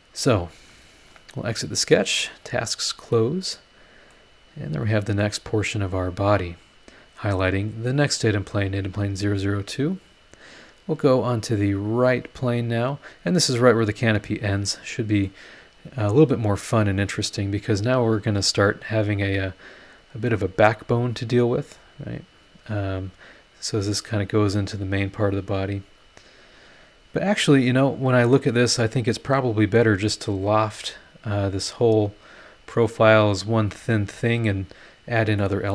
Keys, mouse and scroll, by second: 1.8 click, 2.3 click, 3.1-4.3 middle drag, 3.2-4.3 drag, 3.2-4.3 right drag, 4.3 scroll down 1, 4.8 scroll up 1, 7.8 click, 8.4 click, 8.8 space, 11.2 click, 12.0 scroll down 1, 12.6-12.9 scroll up 1, 14.6 middle click, 14.7 right click, 17.3 scroll down 1, 18.7 scroll down 1, 19.3-20.5 middle drag, 19.4-20.5 drag, 20.5-20.9 scroll up 1, 25.8 scroll down 1, 27.2-27.5 scroll up 1, 28.8 scroll down 1, 34.8 scroll down 1, 35.4 middle click, 35.5 click.